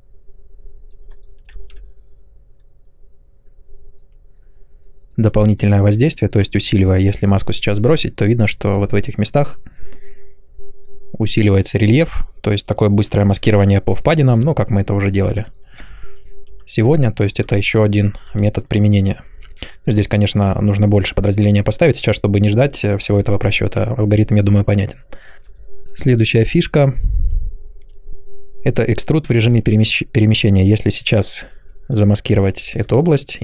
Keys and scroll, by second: 1.5 ctrl+z, 17.5 ctrl+z.